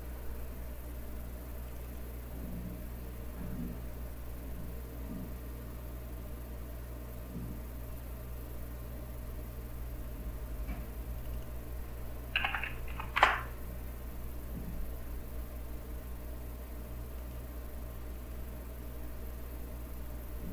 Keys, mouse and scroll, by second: 1.7 click, 5.4 scroll up 2, 11.2 click, 12.1-13.4 typing, 17.2 click, 18.1 click.